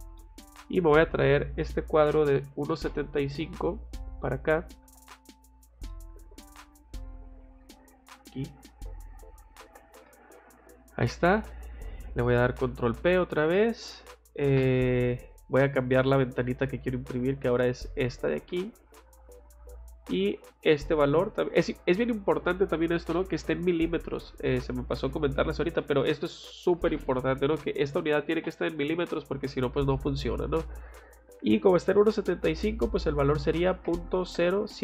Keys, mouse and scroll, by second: 0.1 middle click, 0.6 middle click, 0.9 click, 1.0 click, 2.0 c, 2.5 o, 2.7 space, 3.7 click, 4.8 F8, 5.2 middle click, 5.9 middle click, 9.2 click, 9.7 Escape, 10.0 middle click, 12.6 ctrl+p, 16.3 click, 17.7 click, 18.9 click, 30.5 click.